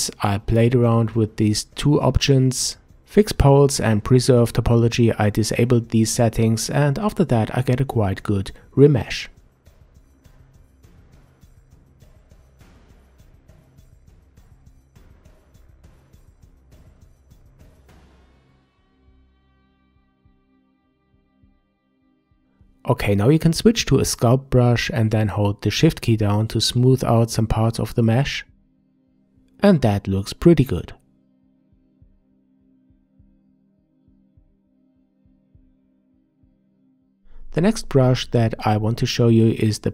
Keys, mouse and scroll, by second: 0.0 Tab, 1.4-4.5 drag, 13.1-15.8 middle drag, 15.8-16.9 scroll up 4, 16.9-19.9 middle drag, 20.7-21.1 scroll down 1, 21.1-23.2 middle drag, 23.2 click, 23.5 scroll up 2, 24.2-27.2 shift+drag, 27.2-29.4 shift+middle drag, 29.4-32.5 shift+drag, 32.5 middle click, 32.8-34.5 shift+drag, 34.5 scroll down 3, 34.7-35.6 middle drag, 35.6 shift+click, 35.8-36.8 middle drag, 36.9-39.9 shift+middle drag.